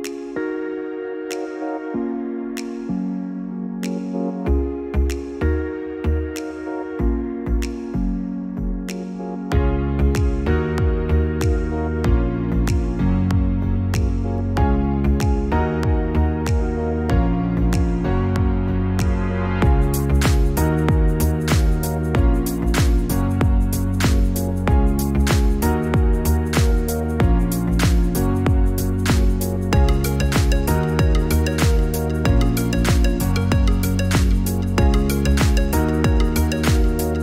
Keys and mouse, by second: 2.7 click, 18.4-32.5 drag, 37.1 KP_6.